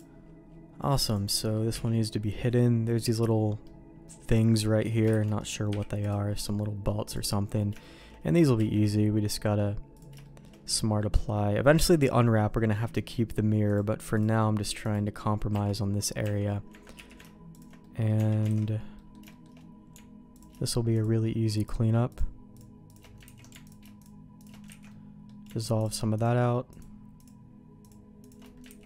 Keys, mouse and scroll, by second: 1.1 click, 1.3 middle click, 1.7 h, 2.9 click, 3.6 middle click, 5.1 shift+d, 5.7 m, 7.0 click, 7.8 shift+middle click, 8.5 q, 10.2 middle click, 10.9 middle click, 13.6 click, 14.7 click, 15.5 Tab, 16.2 Tab, 16.9 q, 17.8 middle click, 18.1 Tab, 18.5 alt+a, 18.9 middle click, 19.3 shift+middle click, 20.3 alt+click, 20.9 alt+shift+click, 21.6-23.0 alt+shift+drag, 23.2 ctrl+x, 23.6 alt+click, 24.4 alt+shift+click, 24.8 ctrl+x, 24.9 middle click, 26.2 alt+shift+click, 27.1 alt+shift+click, 27.8 alt+shift+click, 28.6 ctrl+x.